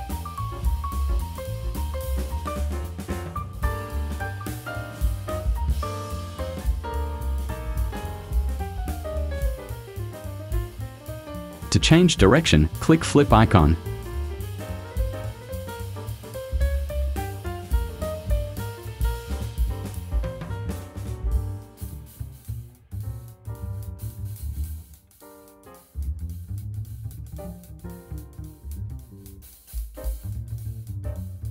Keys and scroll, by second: 23.5 Delete.